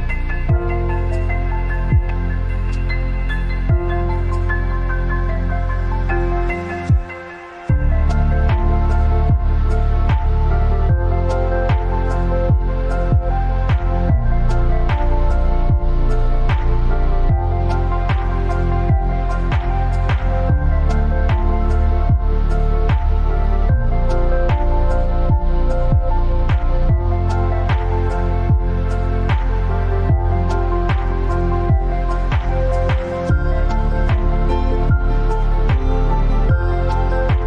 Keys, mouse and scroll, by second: 3.5-4.0 scroll down 2, 5.9-26.4 drag, 26.4-30.4 alt+shift+drag, 32.3 Left, 33.3 Up, 33.8 Left, 34.4 Right, 35.8 click.